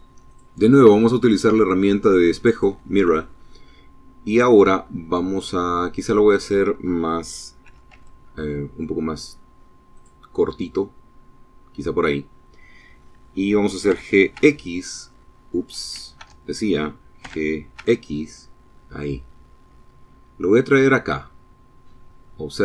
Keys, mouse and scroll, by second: 1.2 click, 2.2-3.3 middle drag, 3.5 scroll up 1, 4.0 middle click, 6.4 s, 6.7 z, 8.7 click, 9.0-11.0 middle drag, 12.6 g, 13.1 x, 14.2 Escape, 15.0 Tab, 15.9 g, 16.5 x.